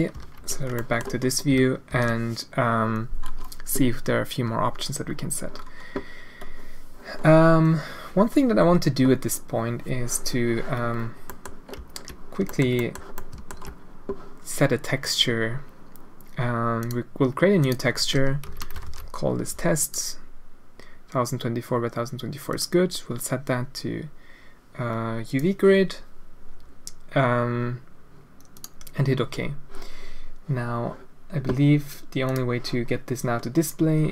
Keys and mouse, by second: 0.1 ctrl+z, 0.8 middle click, 1.9 alt+a, 5.5 middle click, 11.3 click, 11.7 z, 12.1 shift+click, 12.4 shift+middle click, 12.7 middle click, 13.1 middle click, 13.3 alt+shift+click, 16.8-28.6 drag, 33.8 Tab.